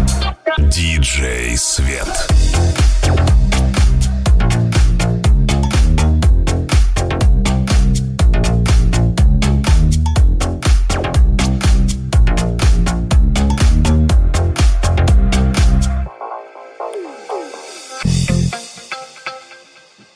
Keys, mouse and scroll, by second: 0.8 ctrl+r, 1.4 g, 6.4 middle click, 6.6 middle click, 6.9-11.5 ctrl+middle drag, 10.3 1, 10.5 alt+z, 11.5-13.4 right drag, 12.1 c, 13.4-18.2 middle drag, 15.9 c, 15.9 alt+z, 16.7 g, 18.2 right click, 18.3-20.1 middle drag, 18.9 alt+z.